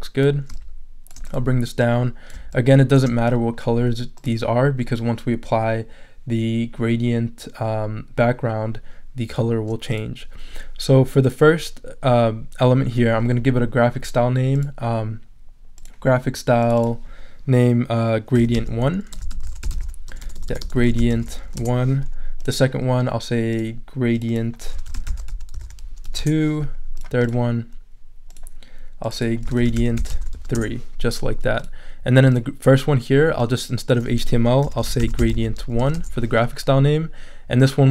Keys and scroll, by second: 18.1-21.9 typing, 24.5-26.5 typing, 29.2-30.8 typing, 34.4-36.3 typing.